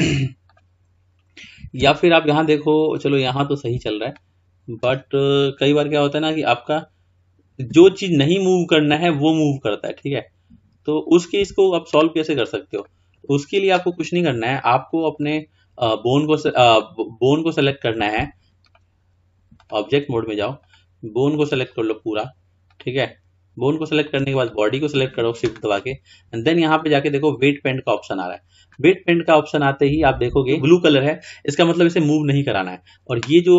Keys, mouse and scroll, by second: 0.5-0.8 drag, 1.8 r, 4.2-6.7 middle drag, 6.7 click, 7.7 r, 12.8 click, 15.1 click, 16.7 click, 18.6-20.9 drag, 22.6 click, 24.3 shift+click, 26.4-29.1 drag, 29.2-30.3 middle drag.